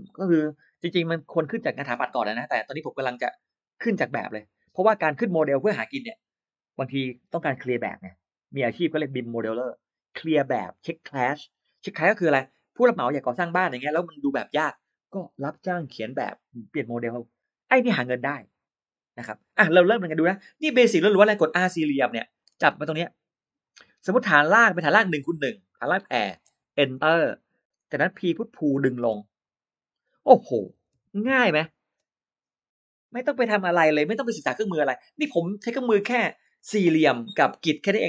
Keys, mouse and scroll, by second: 22.1 r, 22.2 middle click, 23.5 click, 25.8 typing, 26.8 Return, 27.8 middle click, 28.0-28.3 scroll down 1, 28.4-28.7 scroll up 1, 28.9 p, 29.2 click, 30.8 2, 31.2 5, 31.4 Return, 31.8 space.